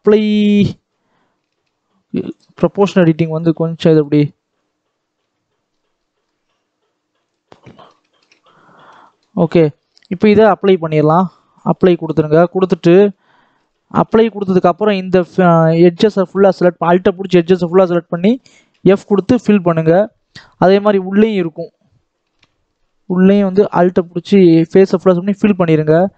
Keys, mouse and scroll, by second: 0.2 click, 1.0-1.3 scroll up 1, 1.4 shift+middle click, 2.2 click, 3.3 click, 4.3-5.1 scroll up 1, 5.1 g, 7.3 scroll down 1, 7.5-9.2 middle drag, 9.2-9.6 scroll up 1, 9.6 middle click, 10.2 Tab, 11.6 click, 12.2 middle click, 12.5-12.8 scroll up 1, 12.8 middle click, 13.1-13.6 scroll up 2, 13.6 click, 14.0 shift+middle click, 14.3-15.1 scroll up 4, 15.1 alt+a, 15.3-16.0 scroll down 1, 16.2 alt+a, 17.2 alt+click, 18.6 f, 19.1 scroll down 1, 19.5 middle click, 20.4 scroll up 1, 20.7 middle click, 21.2-22.2 scroll up 2, 22.2 alt+a, 23.4 alt+click, 25.0 f, 25.3-25.8 scroll down 4, 25.8 middle click.